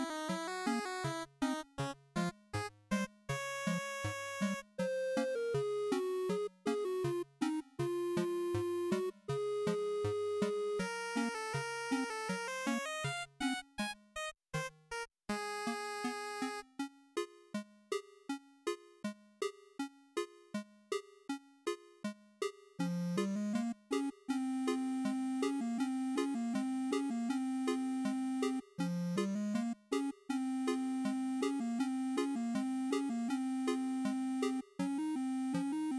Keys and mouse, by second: 7.9-9.3 drag, 16.6-17.9 drag, 21.4-23.1 drag, 35.2 click, 35.3 z.